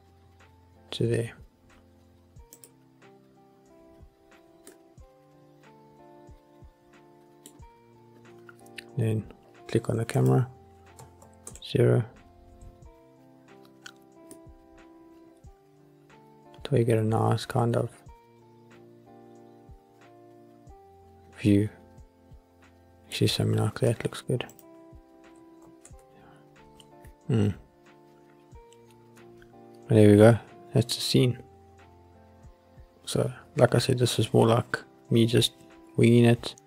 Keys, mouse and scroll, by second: 0.1 middle click, 3.5 click, 4.3 scroll down 1, 4.8-7.7 middle drag, 9.1-10.3 scroll up 4, 10.3 click, 11.6 ctrl+alt+KP_0, 14.5 middle click, 16.4 middle click, 17.5 middle click, 18.2-19.3 middle drag, 19.3 middle click, 19.9-23.3 middle drag, 24.6 click, 26.0 ctrl+alt+KP_0, 27.6 scroll up 1.